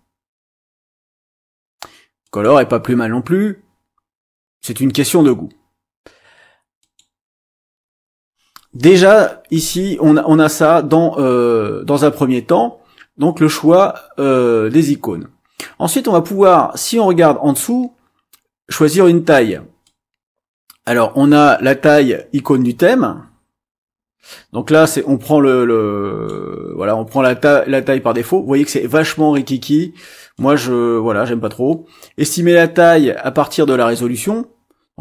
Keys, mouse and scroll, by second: 2.2 click, 6.8 click, 19.8-26.4 drag, 30.3-34.3 drag.